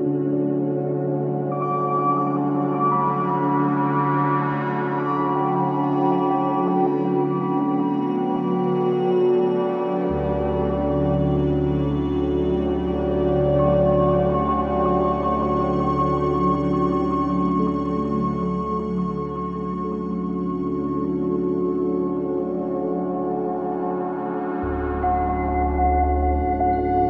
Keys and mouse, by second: 0.5 click, 2.4 click, 4.5 shift+click, 5.8 ctrl+l, 7.2 Down, 7.3 Down, 7.7 Return, 9.2-11.9 alt+drag, 12.2-14.0 alt+drag, 14.6 g, 14.8 y, 17.9 shift+click, 18.9 0, 19.8 ctrl+alt+click, 20.3 alt+click, 21.1 ctrl+alt+click, 22.1-23.1 alt+drag, 23.6-24.2 typing, 24.4-25.7 ctrl+alt+drag.